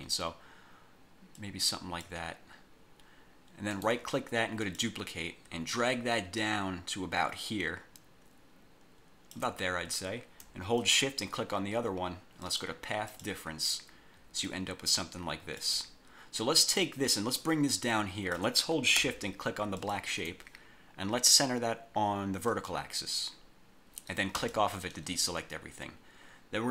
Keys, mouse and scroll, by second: 1.5 click, 3.8 right click, 4.7 click, 5.8-9.7 ctrl+drag, 10.9 shift+click, 12.5 click, 13.2 click, 14.6-15.9 ctrl+drag, 17.0-18.7 drag, 19.9 shift+click, 22.6 click, 24.5 click.